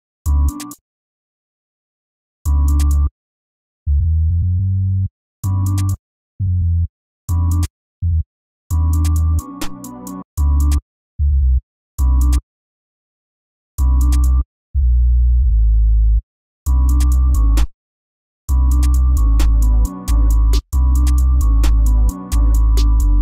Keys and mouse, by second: 22.9 F1.